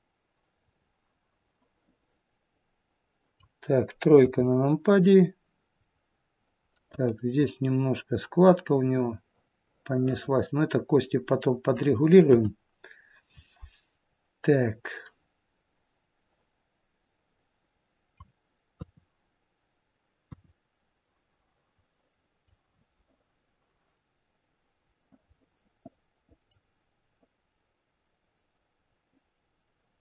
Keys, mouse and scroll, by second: 0.8-1.4 scroll down 1, 1.4 middle click, 3.3-4.1 scroll down 1, 4.1 KP_3, 5.7-6.3 scroll up 2, 6.3-6.7 scroll up 2, 6.7 middle click, 10.9-11.8 scroll down 2, 12.2-13.5 scroll down 1, 12.2 KP_1, 14.0-15.0 scroll down 1, 15.0 middle click, 18.7 KP_3, 20.2 KP_1, 23.2 middle click, 25.4 middle click.